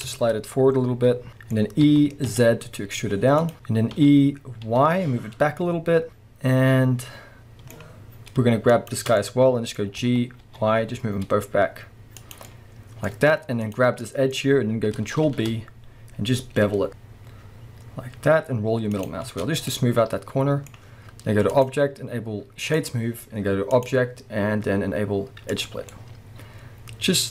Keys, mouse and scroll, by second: 1.8 e, 4.0 e, 8.7 shift+click, 9.2-12.4 middle drag, 10.0 g, 12.4 click, 12.5-13.7 middle drag, 13.1-13.7 scroll up 2, 13.7 click, 14.0-19.0 middle drag, 15.2 ctrl+b, 19.0 click, 19.3 Tab, 19.6 scroll down 1, 19.8-21.5 middle drag, 21.5-25.9 drag, 25.8 scroll down 1, 25.9-27.3 middle drag.